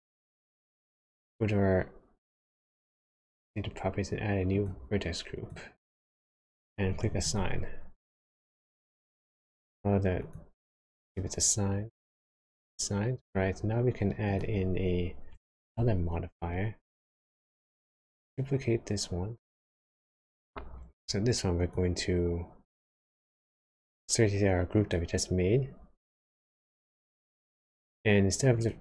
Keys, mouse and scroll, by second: 3.0 click, 4.5 click, 5.4 click, 7.2 click, 10.2 click, 12.5 click, 14.2 click, 15.3 Tab, 17.5 click, 21.6 click, 28.5 click.